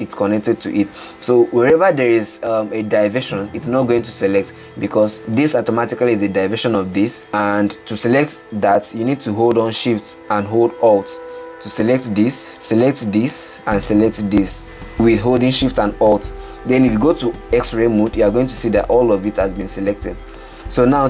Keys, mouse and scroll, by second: 0.3-5.8 middle drag, 5.8 click, 12.2 alt+shift+click, 13.1 alt+shift+click, 14.1 alt+shift+click, 14.6-18.0 middle drag, 18.0 alt+z, 18.6-21.0 middle drag.